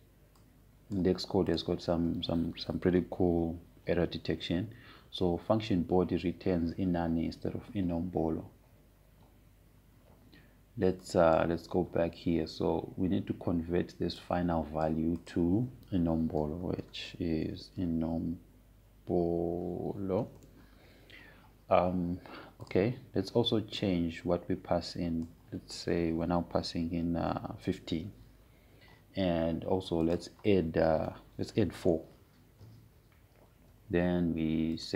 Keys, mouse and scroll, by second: 2.0 click, 12.4-13.2 typing, 12.7-15.7 drag, 15.8 click, 18.2-22.6 typing, 24.3-29.4 drag, 25.5-26.3 typing, 29.3-30.3 typing, 31.8 click, 32.8-33.4 typing.